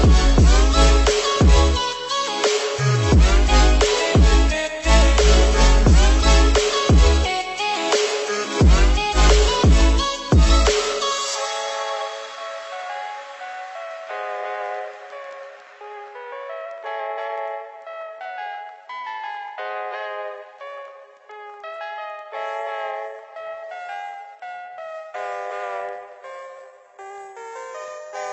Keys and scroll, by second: 1.8 ctrl+c, 1.9 ctrl+v, 6.7 ctrl+0.